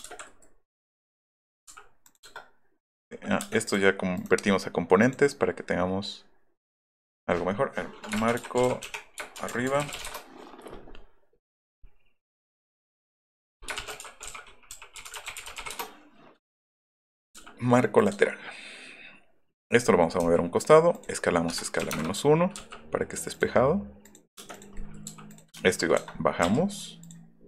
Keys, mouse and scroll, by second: 0.0 space, 0.1 Escape, 0.7 click, 1.0 click, 1.3 click, 1.7 m, 2.1 click, 3.4 space, 3.6 click, 4.2 click, 8.0-10.5 typing, 11.5 right click, 13.5-16.1 typing, 17.2 middle click, 17.4 m, 20.2 s, 21.0 click, 21.5 KP_Subtract, 21.8 KP_1, 22.6 m, 23.3 click, 24.0 click, 24.6 click, 25.1 m, 25.3 right click, 25.9 middle click, 26.5 Up, 27.0 click.